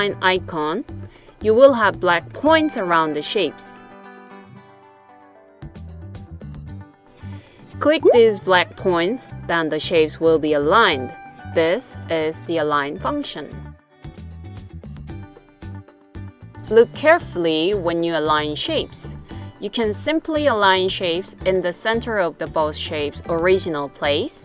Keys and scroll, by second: 19.2 d.